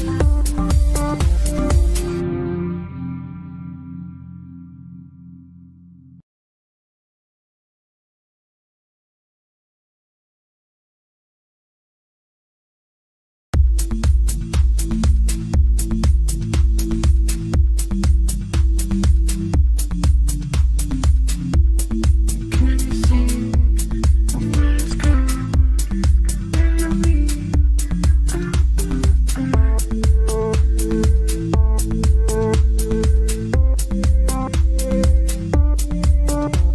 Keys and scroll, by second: 35.1 ctrl+z.